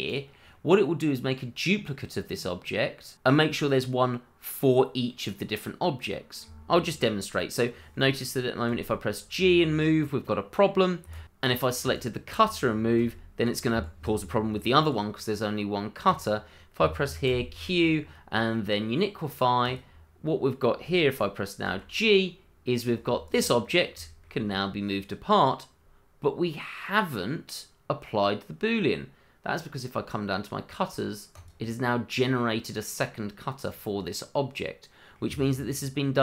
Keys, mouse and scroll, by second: 0.1 click, 0.5 middle click, 3.4 click, 3.8 middle click, 5.1 middle click, 11.0 Escape, 11.4 click, 11.9 shift+click, 12.0 click, 13.0 g, 13.7 Escape, 14.8 click, 17.2 q, 19.6 click, 23.2 click, 23.7-24.0 scroll down 1, 24.0 shift+middle click, 24.4-26.4 scroll up 1, 29.5-31.3 scroll down 1, 31.3 click, 32.3 middle click, 33.6 click, 34.2 middle click.